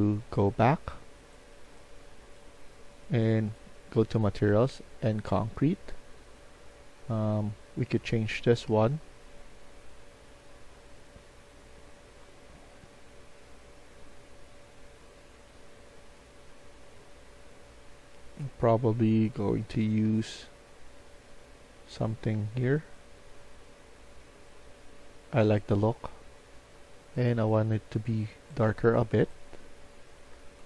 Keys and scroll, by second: 30.2-30.6 typing.